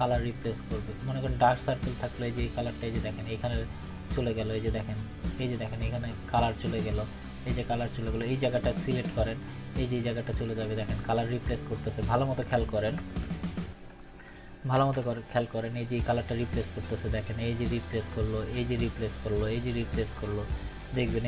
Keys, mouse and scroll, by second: 12.9 ctrl+=, 13.8 scroll up 1, 14.7 ctrl+-, 16.8-18.0 drag.